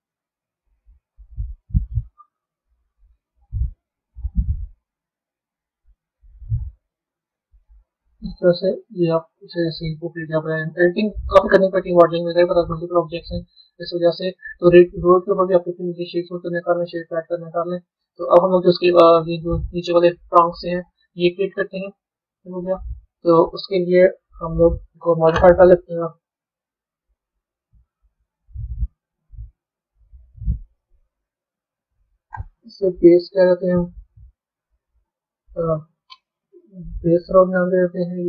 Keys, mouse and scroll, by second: 0.0-2.3 middle drag, 2.3 KP_3, 7.5-10.5 middle drag, 11.8 Tab, 12.8-14.6 middle drag, 14.6 click, 15.2-17.2 right drag, 17.2-17.9 scroll down 3, 17.9-19.6 middle drag, 21.9-22.3 scroll down 2, 22.3-24.0 middle drag, 24.0 KP_1, 25.2 KP_3, 27.0 click, 28.0 click, 33.6 click, 34.4 click.